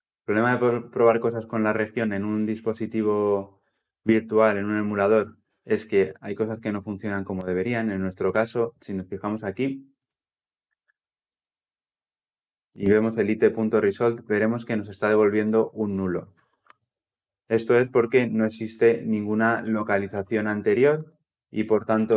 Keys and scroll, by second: 9.9 Insert, 12.5 Insert, 12.5 Return, 20.0 Delete, 21.9 Delete.